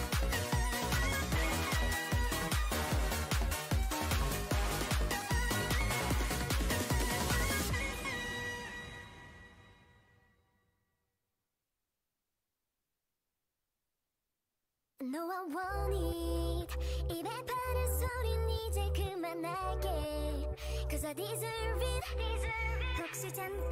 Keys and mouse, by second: 1.2 e, 2.5 g, 3.6 e, 5.6-9.6 typing, 6.3-9.3 drag, 11.2 e, 15.5 e, 15.7 e, 16.7 e, 17.4 e, 18.1 e, 21.8-23.7 middle drag.